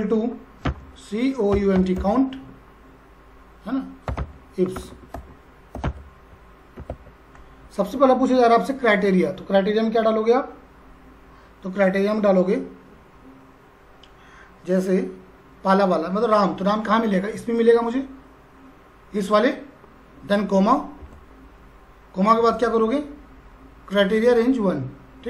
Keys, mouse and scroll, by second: 0.6-2.5 typing, 3.8-6.3 typing, 6.8 Down, 6.9 Tab, 17.5 click, 21.0 ,.